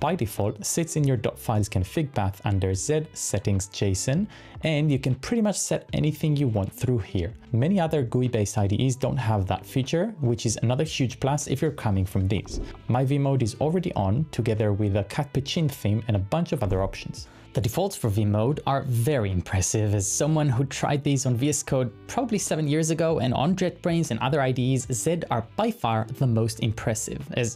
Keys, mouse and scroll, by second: 0.0-1.2 typing, 3.5 shift+v, 4.5 shift+v, 6.2-6.7 typing, 11.5-12.9 typing, 16.9 typing.